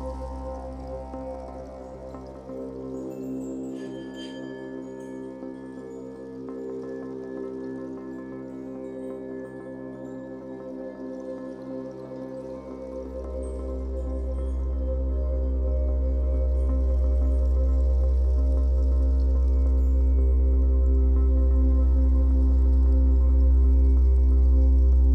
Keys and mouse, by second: 4.1-9.5 drag, 10.7-11.4 alt+shift+drag, 15.3 alt+shift+click, 16.5 alt+shift+click, 17.3-18.4 ctrl+alt+drag, 18.8 ctrl+alt+click, 19.9-21.0 alt+shift+drag, 22.5-24.6 drag.